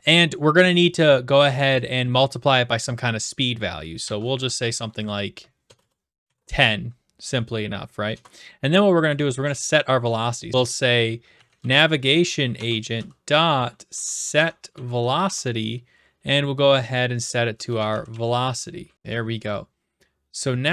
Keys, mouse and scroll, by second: 4.0-6.7 typing, 8.1 Return, 10.5-15.4 typing, 12.5 Tab, 17.4-18.6 typing, 18.9 Right, 18.9 ctrl+s.